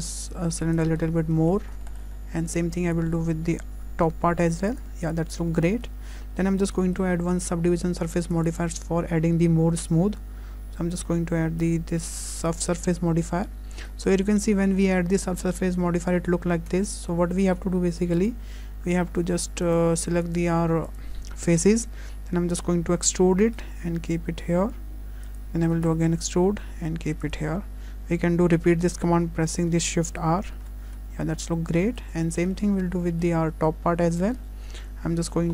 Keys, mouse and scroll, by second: 0.8 s, 1.0 scroll down 4, 1.1 s, 1.3 shift+middle click, 2.1 shift+middle click, 2.2 scroll up 3, 2.6 click, 5.3 scroll down 3, 5.7 shift+middle click, 6.0 Tab, 6.4 middle click, 6.8 shift+middle click, 8.3 click, 13.4 middle click, 14.1-14.4 scroll up 3, 14.4 shift+middle click, 14.8 middle click, 16.7 Tab, 17.1 middle click, 18.2 click, 19.7 click, 20.9 click, 23.1 e, 25.7 e, 30.2 shift+r, 30.6 shift+r, 31.1 Tab, 31.4-31.7 scroll down 4, 31.7 middle click, 32.3 shift+middle click, 32.5 middle click, 32.8-33.1 scroll up 3, 33.1 shift+middle click, 33.5 Tab, 33.8-34.4 scroll up 2, 34.1 middle click, 35.3 3.